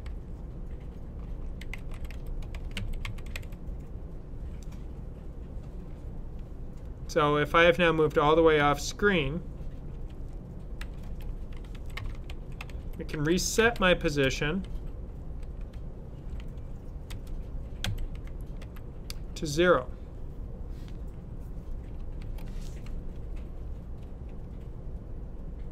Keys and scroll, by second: 0.0-3.8 typing, 9.8-10.7 typing, 11.7-14.1 typing, 16.1-17.0 typing, 18.5 typing, 23.0-25.6 Right.